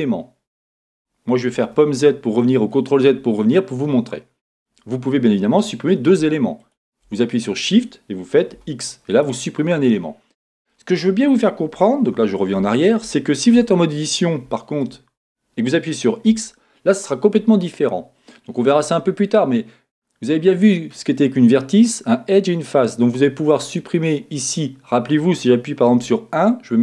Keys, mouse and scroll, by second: 1.5 z, 4.7-6.6 scroll up 2, 6.6 scroll up 1, 6.6 shift+click, 6.7-7.8 middle drag, 8.5 x, 9.9-26.0 middle drag, 12.1 z, 13.6 Tab, 15.1-16.3 scroll up 2, 16.3 x, 23.8 click, 26.0 1.